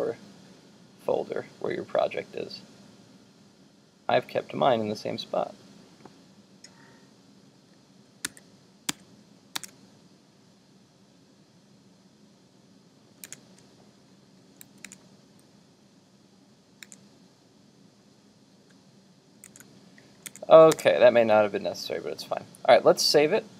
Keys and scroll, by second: 8.3 super+w, 9.8 super+Tab, 13.3 super+Tab, 14.9 super+Tab, 19.5 super+Tab.